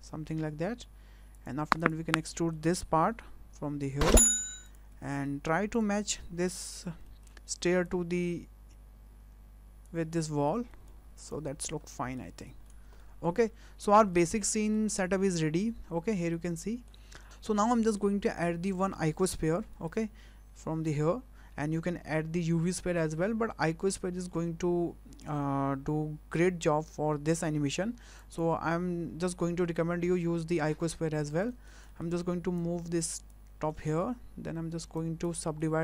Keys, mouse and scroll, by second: 1.8 click, 2.1 middle click, 3.1 e, 4.6 click, 4.9 Tab, 5.2 middle click, 5.7 click, 6.0 middle click, 6.8 w, 7.0 middle click, 7.8 click, 10.1 middle click, 10.7 middle click, 11.1 click, 11.8 scroll up 6, 12.2 middle click, 12.6 scroll down 2, 13.0 shift+middle click, 13.4-14.0 scroll up 3, 14.1 middle click, 14.5 middle click, 15.0 scroll down 2, 15.3 shift+middle click, 16.3 middle click, 17.2 shift+middle click, 19.7 shift+a, 31.0-31.3 scroll up 3, 31.4 shift+middle click, 31.9 middle click, 32.5 click, 33.7 shift+middle click, 34.4 scroll up 1, 35.0 click, 35.4 shift+middle click.